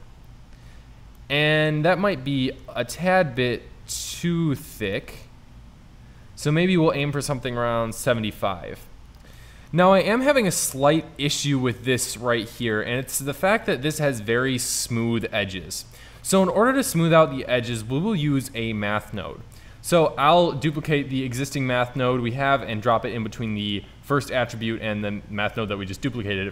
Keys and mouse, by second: 6.4-8.1 drag, 8.6 click, 9.2 click, 17.1-18.5 drag, 20.6 shift+d, 23.7 click.